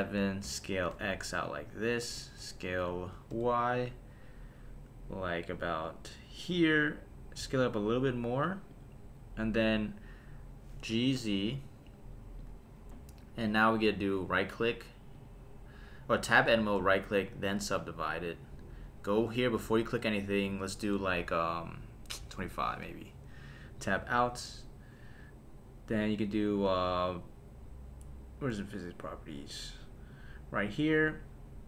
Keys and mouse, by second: 0.4 s, 0.9 x, 2.2 click, 2.4 s, 3.3 y, 6.4 click, 7.4 s, 8.7 click, 10.9 g, 11.2 z, 12.4 click, 14.3 Tab, 15.1-18.2 right drag, 19.7 click, 20.5-22.7 drag, 23.8 Tab, 29.3 click.